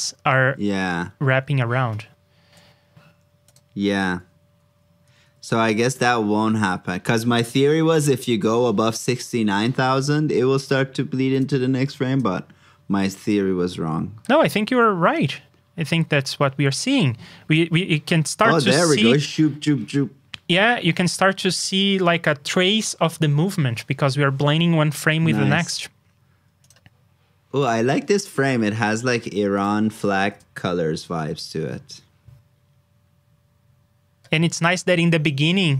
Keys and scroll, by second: 10.7 super+c, 11.7 super+v.